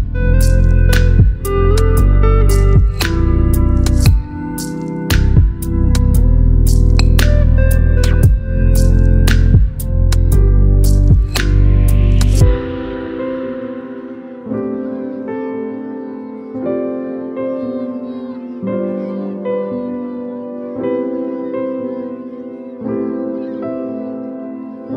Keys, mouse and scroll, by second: 0.4-6.2 drag, 7.4 ctrl+c, 8.5 click, 11.7 ctrl+v, 12.5 Return, 13.6 alt+BackSpace, 15.5 ctrl+d, 17.7 click, 19.9-20.9 space, 20.9 space, 22.0 ctrl+z, 23.6 ctrl+0.